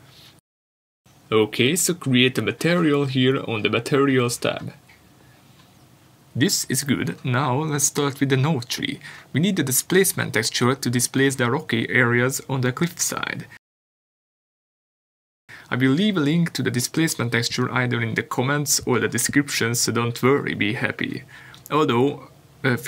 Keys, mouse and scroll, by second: 3.1 click, 6.8 r, 7.5 Return, 7.6 scroll down 1, 8.3 click, 10.9 click, 13.4 Delete, 15.5 n.